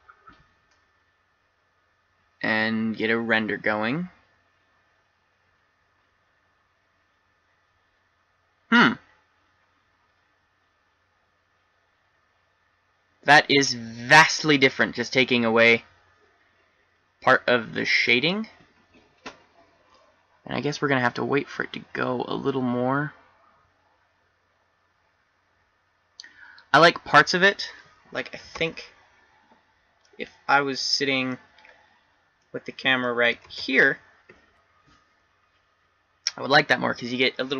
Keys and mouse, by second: 29.0 shift+z, 33.7 shift+z.